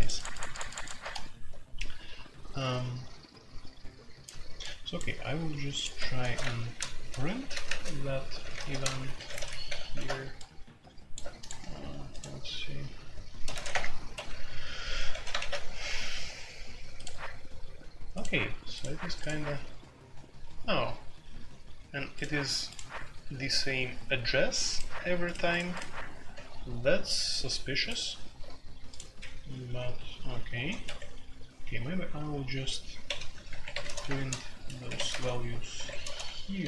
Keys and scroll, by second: 5.9 Escape, 6.2-8.9 typing, 6.5 Return, 9.1 Escape, 9.2 F2, 9.6 ctrl+c, 9.8 ctrl+c, 13.5 a, 13.7 Return, 14.1 Escape, 15.1 ctrl+c, 15.3 alt+o, 29.1 Escape, 30.6 a, 30.8 Escape, 31.3 h, 33.0-36.6 typing, 34.8 Escape.